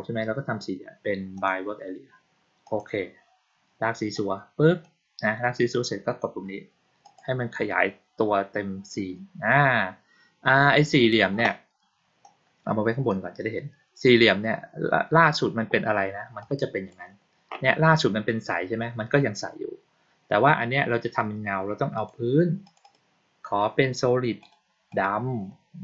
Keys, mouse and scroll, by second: 1.3 click, 2.6 click, 4.1 click, 6.9 click, 12.1-13.0 drag, 16.3 click, 21.9 click, 22.5 click, 22.7 click, 24.3 click, 24.8 click.